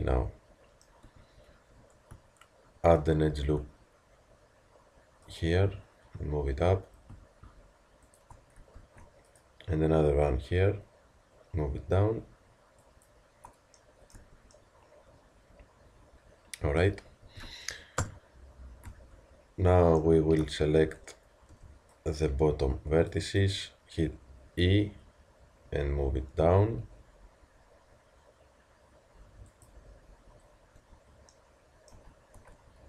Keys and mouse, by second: 1.1 Tab, 2.2 Tab, 3.3 ctrl+r, 8.8 ctrl+r, 14.2 Tab, 17.1 Tab, 18.0 KP_1, 18.9 z, 20.8 a, 21.5 b, 30.8 Tab, 31.9 z, 32.4 Tab.